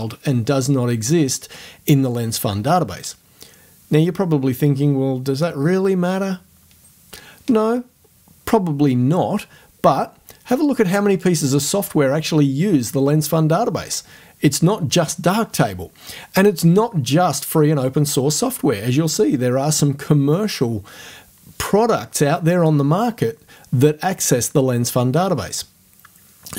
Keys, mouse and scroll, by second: 11.1 click.